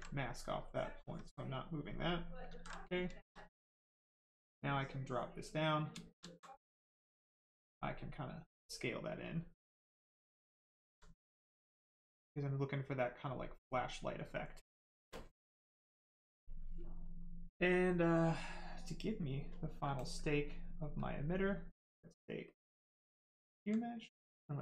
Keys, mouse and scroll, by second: 0.1 right click, 1.0 click, 1.8 right click, 2.5 ctrl+z, 2.7 right click, 4.7 shift+click, 5.6 right click, 6.3 alt+right click, 7.1 click, 8.7 right click, 9.8 shift+right click, 10.5 alt+right click, 11.4 click, 11.5 click, 16.6 right click, 19.9 ctrl+click, 22.5 alt+click, 23.9 click, 24.0 click.